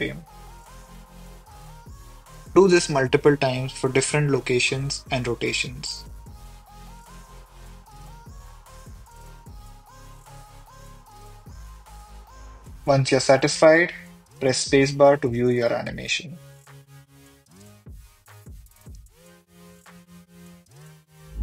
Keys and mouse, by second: 0.6 i, 2.0 click, 2.9 r, 3.0 r, 5.7 i, 6.8 click, 7.4 g, 7.5 y, 8.9 r, 11.1 i, 13.4 r, 13.6 r, 14.4 g, 14.5 y, 15.9 i, 16.6 space.